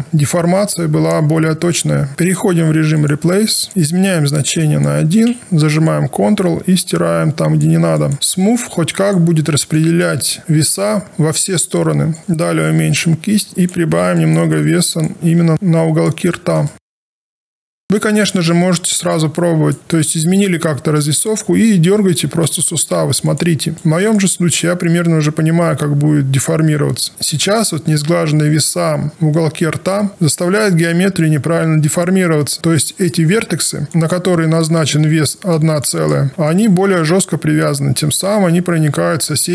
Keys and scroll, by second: 3.7 ctrl+z, 12.2 b, 22.5 w, 33.3 q, 36.3 w.